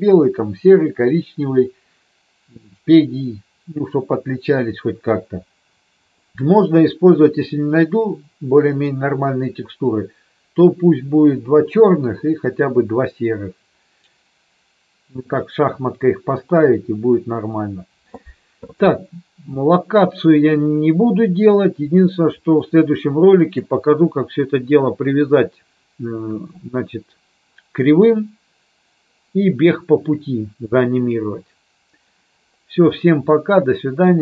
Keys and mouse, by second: 22.6-23.7 middle drag, 33.4-34.2 middle drag.